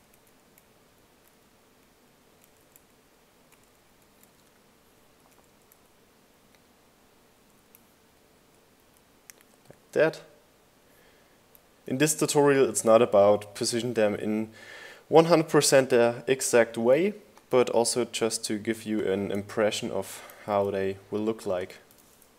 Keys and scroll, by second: 0.1 Left, 1.3 Right, 3.9 Right, 4.7 Right, 5.3 Left, 6.4 Right, 7.8 Left, 8.8 Left, 10.9 Right, 11.5 Right, 19.6 super+g, 21.3-22.3 typing.